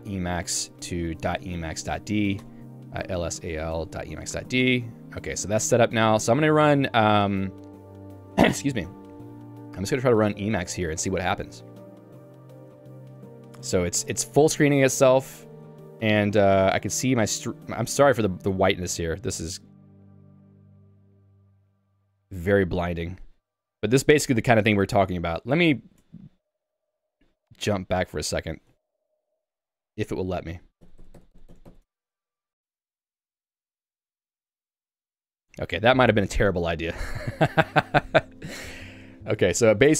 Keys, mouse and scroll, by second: 0.0-0.8 typing, 1.9-4.1 typing, 2.5 Return, 4.4 Tab, 4.8 Return, 7.5-8.4 typing, 11.1 Return.